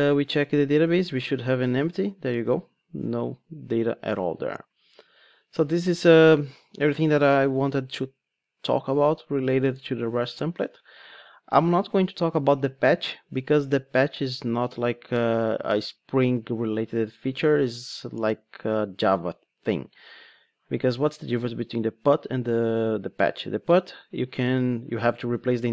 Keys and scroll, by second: 2.7 super+r.